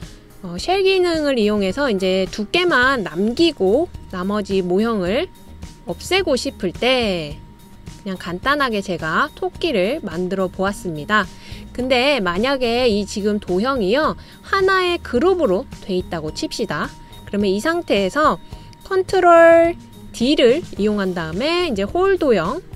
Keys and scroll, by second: 4.8 super+c, 5.0 super+v, 21.1 super+d.